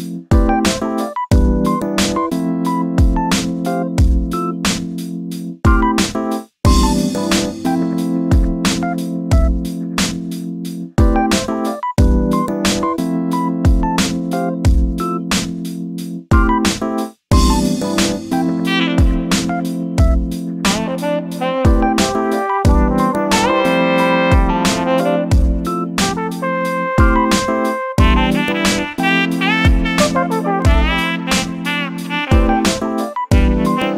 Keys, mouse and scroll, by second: 0.3 shift+click, 0.8 shift+click, 1.0-2.2 middle drag, 2.2 scroll down 3, 2.4-3.0 shift+middle drag, 3.0 shift+click, 3.5 shift+click, 3.9 shift+click, 4.5 shift+click, 4.8-5.4 shift+middle drag, 5.4 shift+click, 5.9 shift+click, 6.4 shift+click, 7.0 shift+click, 7.3 shift+click, 8.0 shift+click, 8.6 shift+click, 8.9 shift+click, 9.4 shift+click, 10.0 shift+click, 10.3 shift+click, 10.9 shift+click, 11.3 shift+click, 11.5 shift+click, 11.8 shift+click, 12.3 shift+click, 12.7 shift+click, 13.0 shift+click, 13.5 shift+click, 13.8 shift+click, 14.2 shift+click, 14.6 shift+click, 14.8 shift+click, 15.2 shift+click, 15.5 shift+click, 16.0 shift+click, 16.4 shift+click, 16.7 shift+click, 17.2 shift+click, 17.5 shift+click, 17.8 shift+click, 18.1 shift+click, 18.7 shift+click, 19.5 shift+click, 20.0 shift+click, 20.7 shift+click, 20.9 scroll up 2, 21.4 shift+click, 21.7 shift+click, 22.3 shift+click, 22.9 shift+click, 23.6 shift+click, 24.0 shift+click, 24.4 shift+click, 24.8 shift+click, 25.6 shift+click, 26.1 shift+click, 26.7 shift+click, 27.3 shift+click, 28.5 shift+click, 29.0 shift+click, 29.4-30.2 shift+middle drag, 30.2 shift+click, 30.7 shift+click, 31.0 shift+click, 31.3 shift+click, 31.7 shift+click, 32.2 shift+click, 32.6 shift+click, 33.0 shift+click, 33.3 shift+click, 33.6 shift+click.